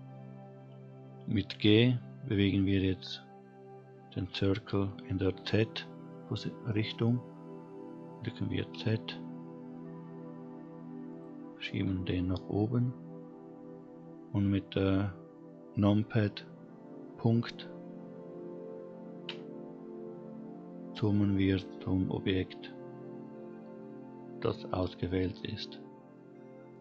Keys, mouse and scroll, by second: 1.5 g, 19.2 KP_Decimal, 25.6-26.7 scroll down 3, 26.7 middle click.